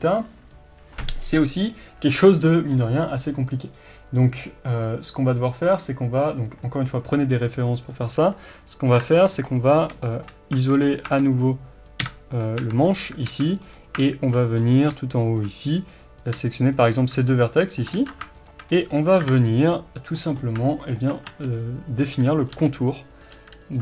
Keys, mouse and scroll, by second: 8.3 click, 9.0 KP_7, 9.5 scroll up 1, 10.1-16.0 shift+middle drag, 10.5 Tab, 12.0 KP_Divide, 12.6 Tab, 13.3 alt+a, 13.6 scroll up 1, 14.6 scroll up 1, 16.0 click, 17.3-18.0 scroll up 1, 18.0 ctrl+z, 18.0 middle click, 18.5 shift+click, 18.7-19.2 scroll down 1, 19.2 KP_7, 20.0-20.7 scroll down 1, 20.7-22.0 shift+middle drag, 21.3 e, 22.0 click, 22.1 r.